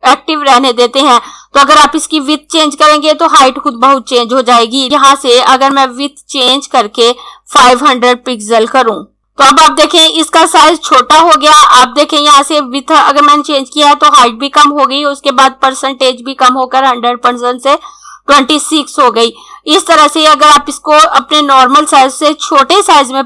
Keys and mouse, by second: 5.7 click, 8.2 5, 9.2 click.